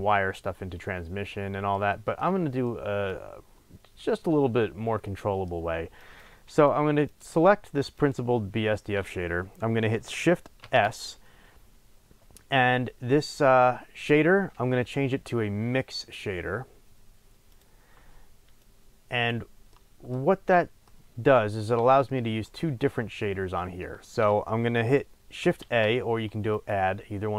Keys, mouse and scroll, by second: 3.6 scroll up 2, 4.6 scroll down 1, 6.2 click, 7.1 click, 7.9 click, 10.6 shift+s, 18.6 drag, 19.6-22.3 middle drag, 20.2-20.8 scroll up 2, 22.9-24.0 scroll down 1, 25.6 shift+a, 26.5 middle click, 26.6-27.3 drag.